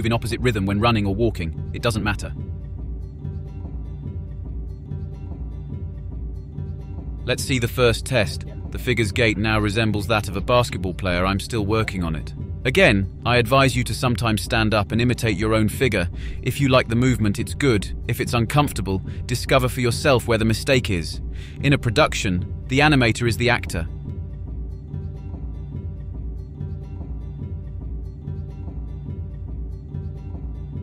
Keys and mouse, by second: 0.2 click, 0.3 click, 0.5 click, 0.7 click, 0.8 click, 1.1 click, 1.3 click, 1.8 click, 2.1 click, 2.6 click, 2.8 click, 2.9 click, 3.5 click, 4.1 click, 4.6 drag, 4.7 click, 4.8 ctrl+c, 4.9 click, 5.0 ctrl+shift+v, 5.1 click, 5.2 ctrl+shift+v, 5.3 click, 5.4 click, 5.9 a, 6.0 drag, 6.1 click, 6.2 ctrl+c, 6.3 click, 6.4 ctrl+shift+v, 6.4 click, 6.6 ctrl+shift+v, 6.6 click, 7.2 KP_Decimal, 7.3 middle click, 13.8 click, 14.1 click, 14.6 click, 14.7 KP_Enter, 15.1 click, 15.5 click, 16.3 click, 16.4 click, 17.0 click, 17.1 click, 17.3 click, 17.8 click, 17.9 click, 18.1 click, 18.3 click, 18.6 click, 18.8 click, 18.8 click, 19.1 click, 19.3 click, 19.6 click, 19.8 click, 20.3 click, 20.4 click, 20.7 click, 20.9 click, 21.2 click, 21.4 click, 21.6 click, 21.8 click, 22.1 click, 22.3 click, 22.4 click, 22.7-23.3 drag, 23.3 a, 23.4 click, 23.5 ctrl+c, 23.6 click, 23.8 ctrl+shift+v, 23.8 click, 24.1 click, 24.5 click, 24.9-26.5 drag, 27.1 click, 27.5 click, 27.8 click, 28.1 click, 28.4 click, 28.8 click, 29.1 click, 29.3 click, 29.5 click, 29.8 click, 30.4 click, 30.7 click.